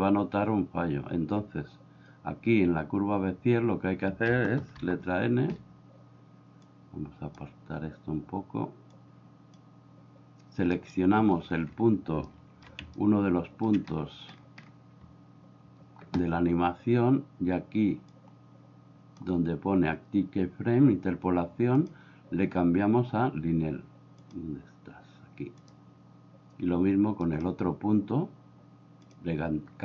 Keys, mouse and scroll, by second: 4.8 n, 6.6 click, 8.9 click, 12.4 shift+middle click, 13.0 ctrl+middle click, 18.1 click, 21.9 click, 24.3-25.7 drag, 29.1 click.